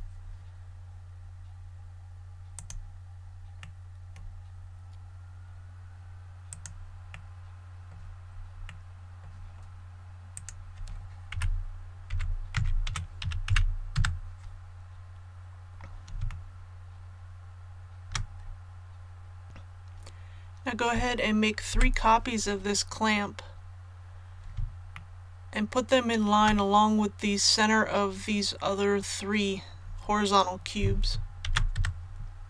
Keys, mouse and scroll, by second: 2.5 click, 3.5-4.7 middle drag, 6.4 right click, 7.1-9.7 middle drag, 10.3 right click, 11.3 KP_1, 12.0 e, 13.2 KP_Decimal, 13.4 KP_1, 14.6 a, 14.8-15.1 scroll down 1, 16.2 shift+middle click, 19.4 click, 22.9-23.3 scroll down 1, 24.9 shift+middle click, 31.4 shift+d.